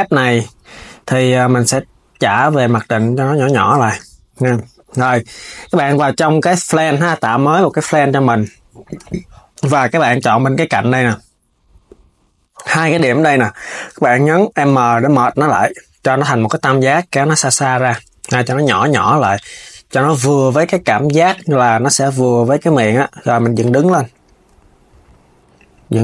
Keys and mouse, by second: 1.4 click, 3.4 s, 6.3 shift+a, 7.3 KP_7, 9.4 Tab, 9.8 click, 10.7 click, 12.9 m, 16.2 click, 17.1 Tab, 17.6 Tab, 17.9 a, 21.2 KP_1, 23.0 r.